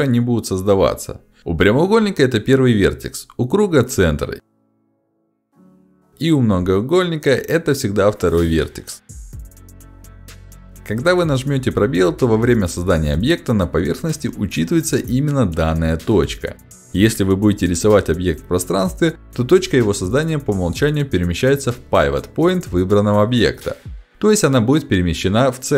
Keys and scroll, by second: 4.1 3, 6.1 2, 11.5 space, 14.6 space, 16.8 ctrl+shift+x.